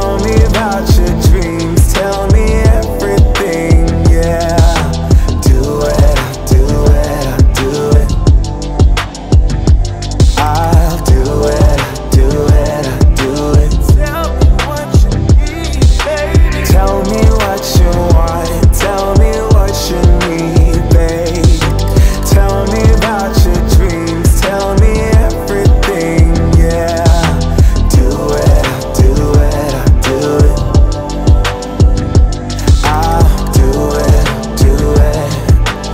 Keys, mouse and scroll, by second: 3.1 scroll down 1, 4.7 scroll up 1, 6.5-10.0 drag, 10.0 Page_Down, 11.4 click, 12.2 space, 15.9-18.4 drag, 18.9 click, 19.5 space, 21.7-23.7 drag, 23.7 Page_Up, 24.3 Page_Up, 27.2 ctrl+z, 29.1 scroll down 1, 30.9-34.2 drag, 34.2 scroll up 1, 35.5-35.9 drag.